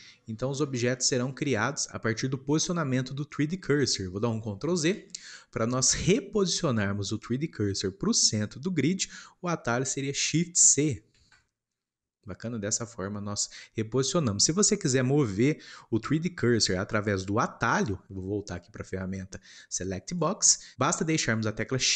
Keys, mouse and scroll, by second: 4.9 ctrl+z, 11.1 shift+c, 12.6-20.1 shift+middle drag, 20.1-21.9 drag.